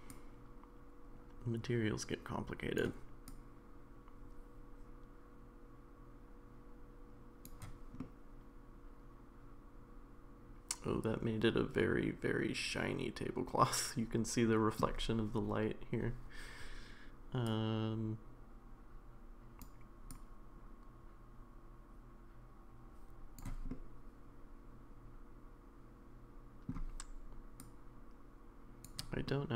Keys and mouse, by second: 0.2-2.8 drag, 3.3-7.5 drag, 8.0-14.8 middle drag, 17.4-19.7 drag, 20.2-23.4 drag, 23.7-26.7 middle drag, 27.7-28.8 drag, 29.2-29.5 middle drag.